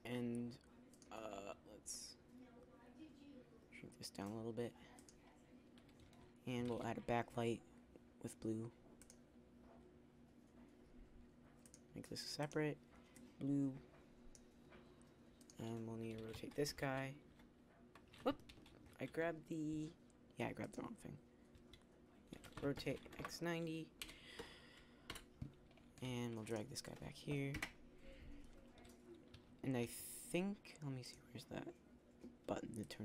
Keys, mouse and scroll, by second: 1.2 right click, 1.3 s, 6.7 shift+d, 16.2 r, 21.5 ctrl+z, 22.3 r, 24.1 KP_1, 24.1 KP_4, 25.9 g, 27.3 KP_0, 28.7 z, 29.2 z, 29.8 z.